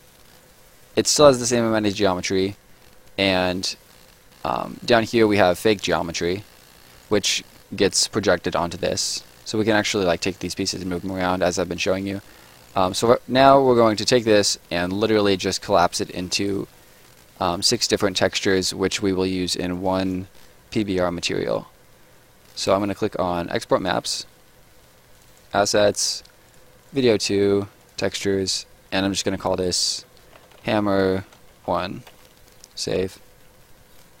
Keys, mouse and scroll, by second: 3.0 click, 4.1 scroll down 1, 4.4 scroll up 1, 4.6 right click, 5.4 middle click, 5.5 scroll up 1, 5.8 right click, 6.6 scroll up 1, 6.8 right click, 8.7 middle click, 9.4 click, 9.6 scroll down 1, 9.9 right click, 10.2-10.5 scroll down 1, 10.5 right click, 10.9-11.2 scroll down 2, 11.0 middle click, 11.8 right click, 12.0-12.5 scroll down 2, 12.2 middle click, 12.5 right click, 19.7 click, 22.4 right click, 23.7 click, 29.8 shift+click, 32.0 Return.